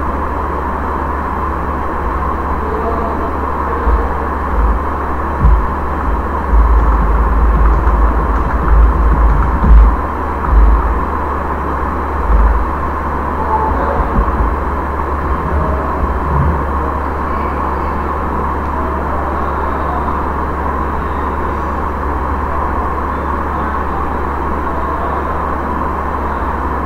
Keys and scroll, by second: 4.4-10.4 typing, 11.8-12.8 typing, 22.6 ctrl+a, 26.7-26.8 typing.